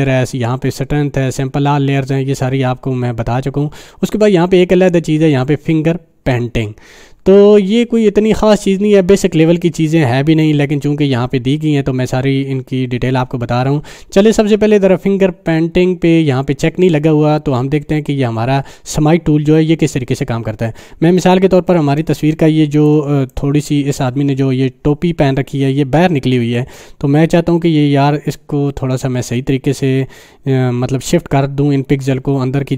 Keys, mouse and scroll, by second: 7.8 scroll up 1, 21.8 space, 22.0 click, 22.2-22.6 space, 23.3-24.2 click.